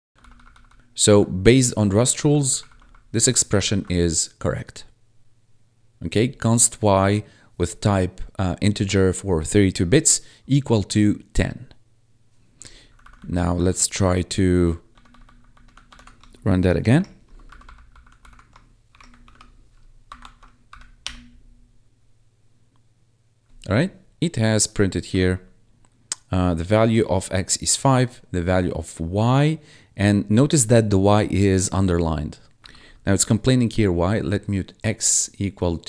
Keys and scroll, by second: 0.1 ctrl+Left, 0.8 Down, 1.9 ctrl+shift+Left, 3.1 ctrl+shift+Right, 3.5 ctrl+shift+Left, 12.8 Down, 14.8 Right, 15.8 shift+Right, 16.8 shift+y, 17.4 Down, 17.5 Left, 18.1 shift+Left, 18.8 shift+y, 19.1 ctrl+s, 20.1 ctrl+`, 20.6 Up, 20.9 Return, 25.2 1, 32.8 1.